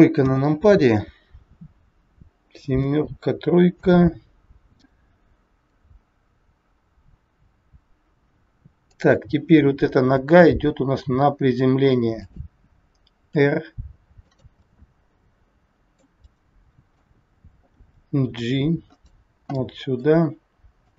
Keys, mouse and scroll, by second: 0.2 KP_7, 2.6 KP_7, 3.8 KP_3, 8.8 click, 10.3 g, 14.6 middle click, 14.6 r, 16.4 middle click, 17.8 g, 19.5 middle click, 20.8 click.